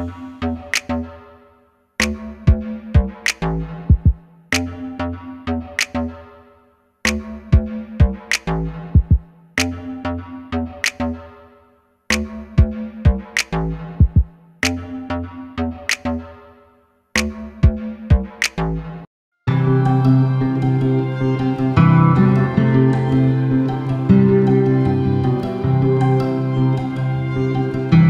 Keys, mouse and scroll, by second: 1.2 click, 2.3 Tab, 2.6 click, 3.0 2, 3.3 click, 4.1 middle click, 4.8 ctrl+click, 5.3 ctrl+z, 5.8 shift+click, 6.5-12.2 middle drag, 7.3 ctrl+b, 12.2 click, 12.8 Tab, 13.0 scroll down 1, 13.2-17.0 middle drag, 13.5 scroll down 1, 14.4 shift+d, 17.0 click, 17.2-19.6 middle drag, 17.5 scroll down 1, 18.5 g, 19.6 click, 21.3 shift+right click, 22.7 shift+a, 23.0 s, 24.2 click, 24.4 s, 26.2 click, 26.5 s.